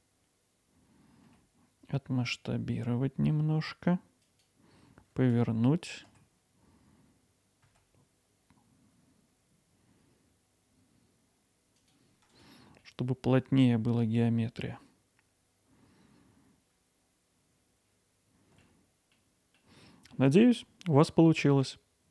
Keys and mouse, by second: 1.3 s, 4.2 click, 6.1 r, 7.7 z, 12.3-12.7 drag, 15.2-18.6 alt+middle drag.